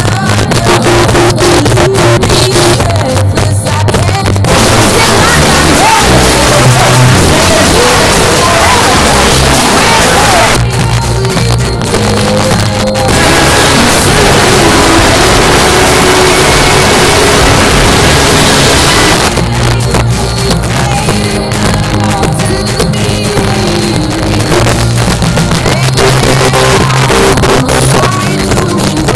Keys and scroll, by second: 0.0 Up, 0.2 Up, 0.3 Up, 0.5 Up, 0.9 Up, 1.3 Return, 10.5 Page_Down, 19.1 Page_Down.